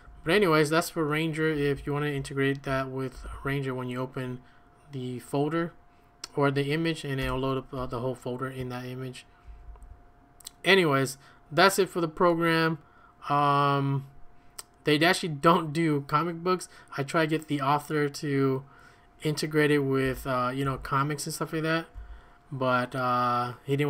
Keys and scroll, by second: 0.0 Escape, 0.2 Escape, 0.2 typing, 2.9-3.6 typing, 7.2 Return, 9.4 ctrl+a, 9.6 ctrl+a, 20.0-21.9 typing.